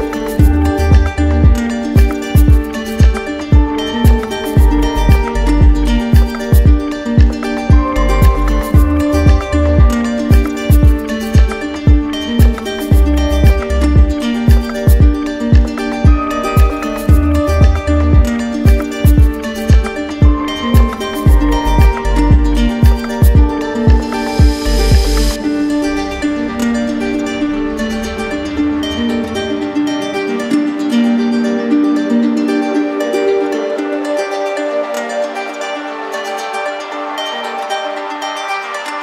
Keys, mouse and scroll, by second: 0.7-1.8 drag, 3.6-4.7 drag, 5.7 click, 6.4 alt+click, 7.2 alt+click, 12.4 click, 15.2-16.3 drag, 16.8-17.9 drag, 18.4-19.5 drag, 20.4-21.5 drag, 22.7 click, 23.4 shift+click, 25.3 click, 27.2 click, 27.6 click, 28.0 alt+click, 31.9 right click, 32.7 right click, 33.6-34.7 drag, 36.7-37.8 right drag.